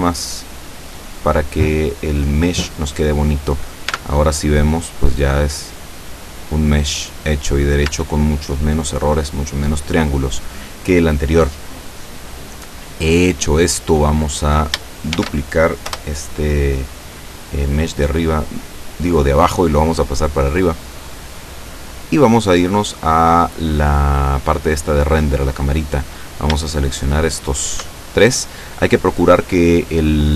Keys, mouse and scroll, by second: 0.4 click, 4.0 Tab, 4.6-5.2 scroll down 2, 5.7-6.3 scroll up 1, 7.0-7.7 scroll down 4, 7.9 Tab, 13.7-14.0 scroll down 2, 14.3 right click, 15.2 shift+d, 16.0 Return, 16.8 middle click, 17.5 scroll up 1, 17.6-19.2 drag, 19.3-20.5 middle drag, 20.5 scroll up 1, 20.6 scroll down 1, 20.8 scroll up 1, 21.9 click, 26.3 shift+right click, 27.0 shift+right click, 27.6 shift+right click, 28.1-28.5 shift+scroll down 3.